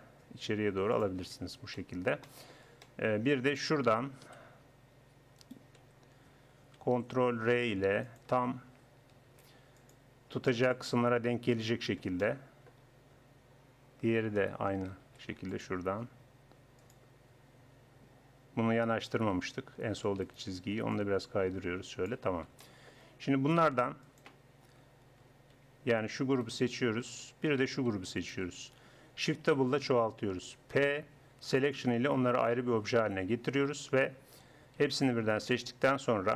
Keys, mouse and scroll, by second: 1.2 Tab, 4.2 KP_1, 5.8 Tab, 9.3 ctrl+r, 15.0 ctrl+r, 19.0 a, 19.4 a, 19.8 a, 24.0-25.2 drag, 25.2 a, 25.6 a, 29.5 shift+d, 30.8 p, 32.0 Tab, 33.7 Tab, 34.8 a.